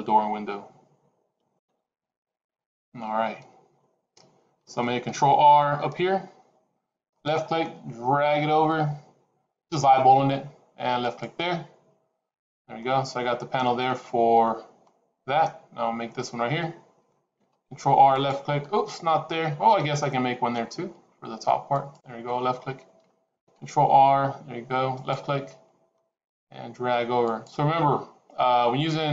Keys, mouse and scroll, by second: 5.4 ctrl+r, 12.2-13.2 scroll down 2, 12.7 middle click, 17.2 ctrl+r, 23.3 ctrl+r.